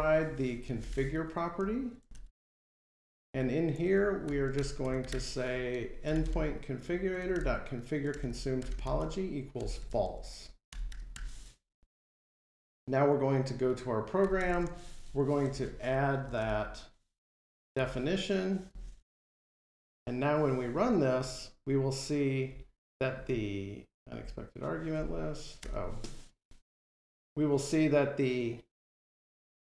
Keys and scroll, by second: 4.3 Delete, 11.0 alt+super+Return, 12.1 ctrl+Tab, 17.7 Return, 18.5 Escape, 20.1 F5, 25.4 Delete.